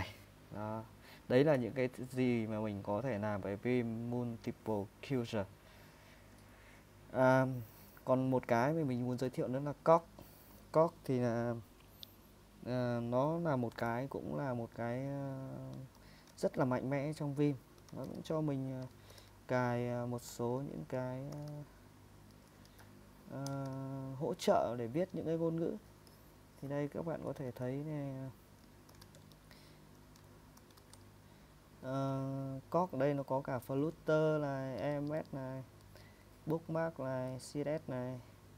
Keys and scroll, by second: 0.8 Escape, 1.6 typing, 14.3 :, 15.8-23.0 typing, 23.5 Return, 23.7 Return, 27.3 ctrl+w, 27.5 ctrl+w, 28.7-29.5 typing, 30.6-31.0 typing, 32.4-38.5 typing.